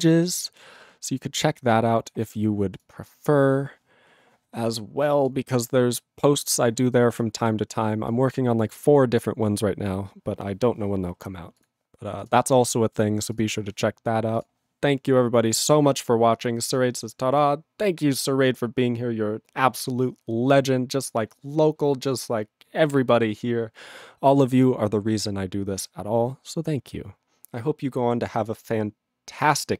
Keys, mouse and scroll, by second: 14.5 ctrl+g, 15.6 click, 15.7 click.